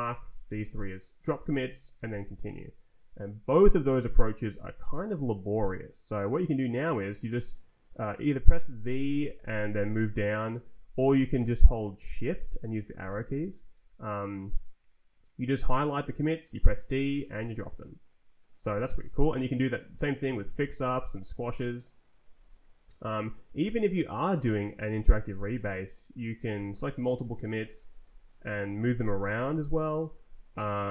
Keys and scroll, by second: 0.1 d, 0.3 Up, 0.4 d, 1.5 m, 1.9 Return, 4.4 z, 4.9 Return, 8.8 v, 9.2 Down, 10.9 Up, 11.3 v, 11.5 Up, 12.2 shift+Down, 12.7 shift+Up, 13.1 shift+Down, 16.6 d, 17.2 Return, 18.6 z, 18.9 Return, 19.8 shift+Down, 20.4 f, 21.2 Return, 22.3 z, 22.8 Return, 23.6 Down, 24.1 Down, 24.9 e, 25.7 Up, 26.6 shift+Down, 28.0 f, 28.4 ctrl+j, 28.6 ctrl+k, 29.2 ctrl+j, 29.7 ctrl+k, 30.2 ctrl+j.